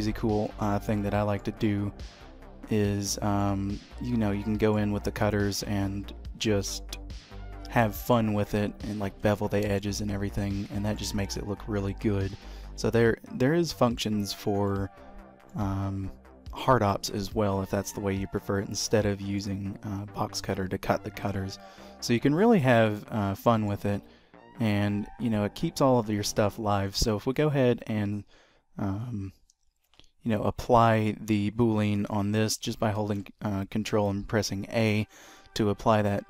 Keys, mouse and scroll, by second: 0.0 click, 0.0-0.5 scroll up 4, 0.5 scroll up 1, 1.1 shift+middle click, 2.5-3.6 scroll down 3, 2.9 middle click, 3.8-4.6 scroll up 2, 4.6 middle click, 7.6-8.0 scroll up 2, 8.1 shift+middle click, 9.5 shift+middle click, 10.1-10.6 scroll down 2, 10.5 middle click, 12.9 middle click, 14.8 middle click, 15.9-17.9 scroll down 1, 17.9-18.5 scroll down 1, 18.5 middle click, 21.3-23.0 scroll up 2, 23.0 click, 23.6 middle click, 24.1 g, 27.1-27.9 scroll up 1, 27.9-29.5 scroll up 1, 27.9 q, 32.9 ctrl+a.